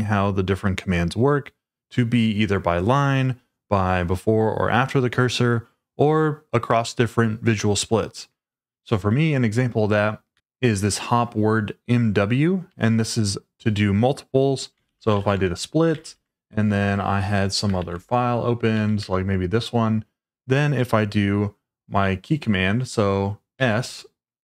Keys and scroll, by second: 10.4 shift+v, 12.7 Escape, 14.6-15.6 typing, 16.1 ctrl+l, 17.8 -, 18.7 k, 19.0 Return, 23.5 s.